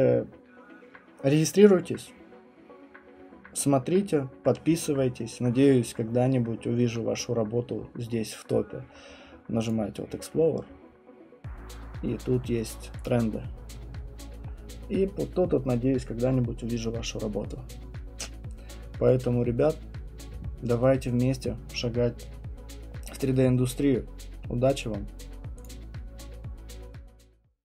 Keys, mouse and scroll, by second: 3.3 scroll, 3.3-3.7 scroll down 7, 3.9 scroll, 3.9 scroll down 4, 4.3-5.9 scroll, 6.5-9.1 scroll, 9.7 click, 10.7-11.3 scroll, 13.0 click, 14.5 scroll, 19.5 click.